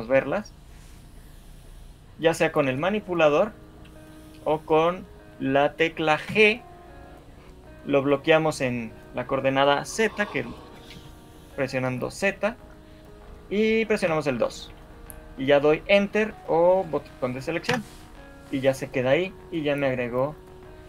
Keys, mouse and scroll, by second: 2.2 click, 6.4 g, 20.7 shift+middle click.